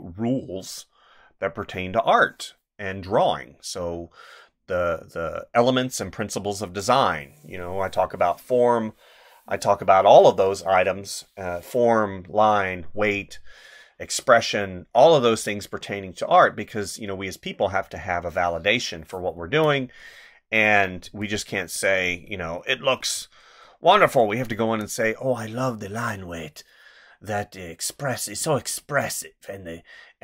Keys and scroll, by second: 19.4 space, 21.0 space, 23.1 space, 24.6 space.